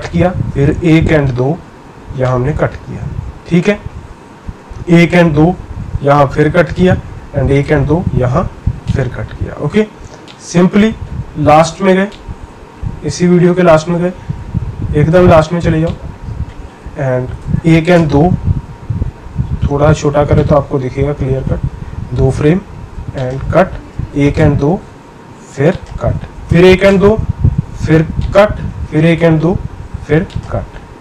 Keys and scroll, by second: 0.4 Right, 1.1 Right, 4.5 Right, 5.1 Right, 7.3 Right, 7.7 Right, 17.4 Left, 18.0 Left, 23.9 Left, 24.4 Left, 26.5 Left, 26.9 Left, 28.8 Left, 29.2 Left.